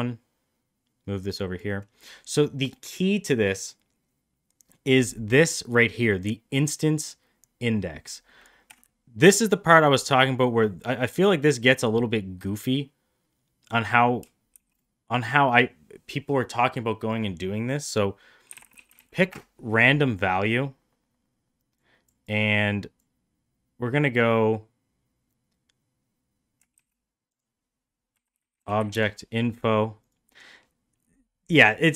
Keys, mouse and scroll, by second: 5.8-9.5 drag, 14.5 shift+a, 21.8 click, 22.4 click, 26.8 shift+a.